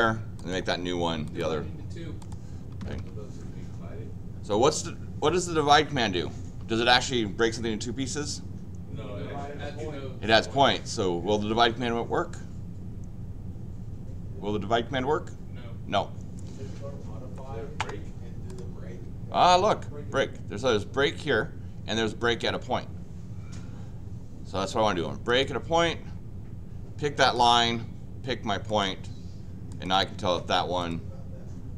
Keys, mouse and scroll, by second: 0.4 click, 1.2 click, 2.2 click, 2.8 Escape, 3.0 Escape, 18.5 click, 25.3 click, 27.2 click, 28.7 click, 29.7 click, 30.8 click.